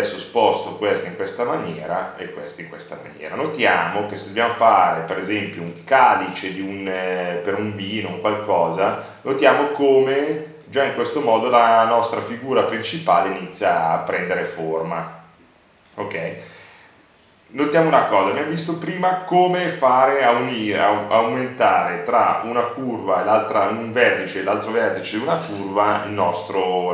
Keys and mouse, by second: 0.6-2.3 drag, 2.3-4.6 middle drag, 5.5-6.8 drag, 6.9-8.0 drag, 8.0 middle click, 8.8 click, 9.6-13.7 middle drag, 13.8 middle click.